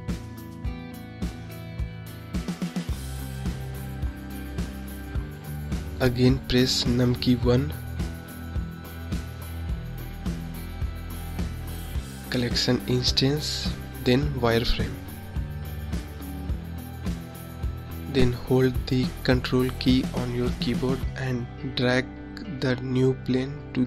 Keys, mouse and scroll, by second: 2.5-4.6 middle drag, 4.6 KP_3, 5.3 KP_1, 6.2-7.3 scroll down 5, 7.3-7.6 scroll up 3, 8.3-11.8 scroll down 4, 11.8 shift+a, 18.6-20.2 drag, 20.8-21.8 scroll down 2, 21.8 click, 23.3 click.